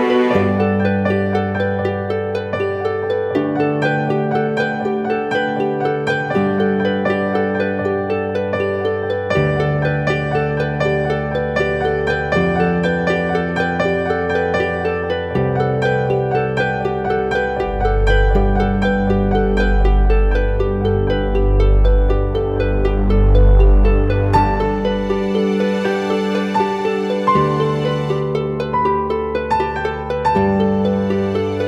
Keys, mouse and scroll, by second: 2.4 [, 2.7 double click, 9.2 right click, 10.5 [, 10.9 [, 11.1 double click, 12.3 [, 12.5 [, 12.8 double click, 27.8 double click.